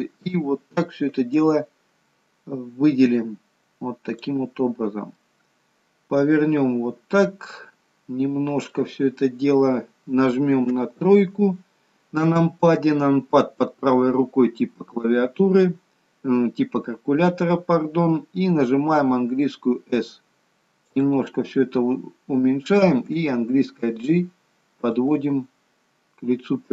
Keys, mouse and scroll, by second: 1.4 click, 5.1 middle click, 10.7 KP_3, 19.2 s, 25.6-26.0 scroll up 3.